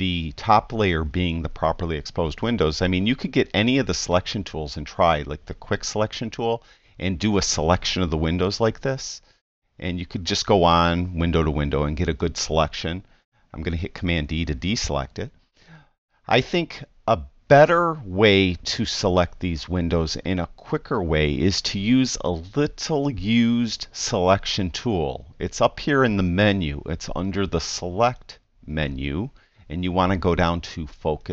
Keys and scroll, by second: 14.2 super+d.